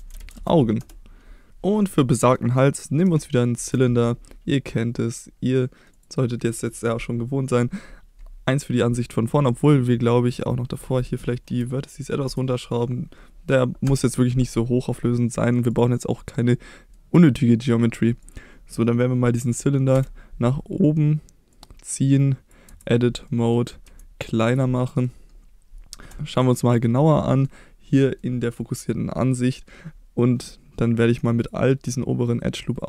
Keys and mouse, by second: 2.1 middle click, 3.6 shift+a, 6.5 middle drag, 10.4-14.4 drag, 15.4 middle click, 15.7 click, 16.4-16.9 middle drag, 18.2 click, 20.0 KP_1, 21.6 click, 22.7 Tab, 23.3 middle click, 23.9 s, 24.5 click, 24.8 middle drag, 25.6 KP_Divide, 27.1 middle click, 28.0 middle click.